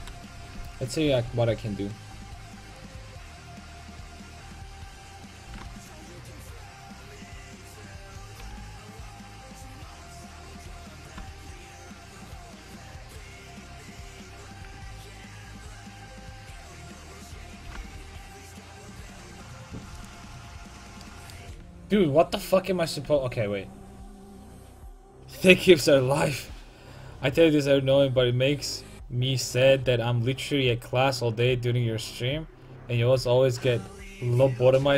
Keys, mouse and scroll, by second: 0.0 KP_1, 1.1 c, 5.5 g, 8.5 r, 11.1 g, 15.0 ctrl+z, 15.6 r, 17.7 g, 20.1 g, 20.2-22.4 drag, 20.4 a, 21.7 ctrl+z, 22.0 ctrl+z, 22.4 ctrl+z, 23.1 a.